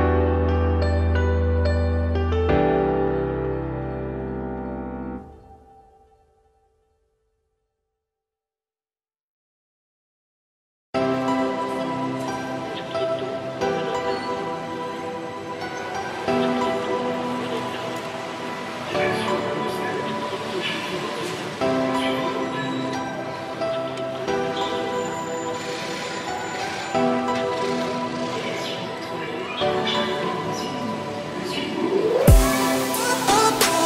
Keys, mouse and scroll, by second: 1.2 click, 2.1 click, 3.5 click, 4.2-6.0 shift+drag, 6.7-7.3 scroll down 3, 7.3 click, 7.8 shift+middle drag, 8.0-8.5 scroll up 4, 8.5 alt+x, 10.8-13.8 shift+drag, 13.9 click, 14.7 click, 15.2-16.0 shift+scroll up 8, 16.1-16.9 scroll down 15, 16.9 click, 18.1-21.0 scroll down 5, 25.2 click, 30.3-31.0 scroll up 2, 31.0-33.8 scroll up 4.